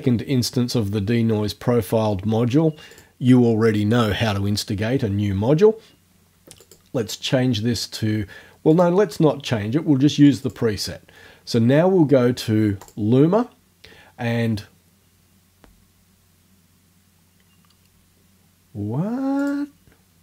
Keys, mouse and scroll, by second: 2.9 click, 6.6 click, 8.7 click, 10.5 click, 12.8 click, 19.4 click.